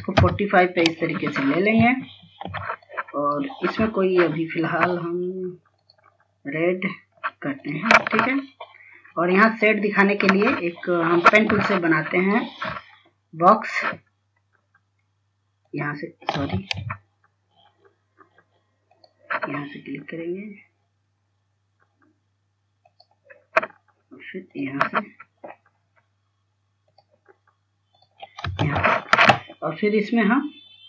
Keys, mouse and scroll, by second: 1.5 click, 2.4 F2, 2.7-5.0 drag, 8.6 scroll up 1, 10.0-10.8 scroll down 1, 11.5 F2, 11.9 click, 15.8 click, 16.7 ctrl+z, 19.1 click, 25.7 scroll down 1, 27.1 click, 28.8 ctrl+space.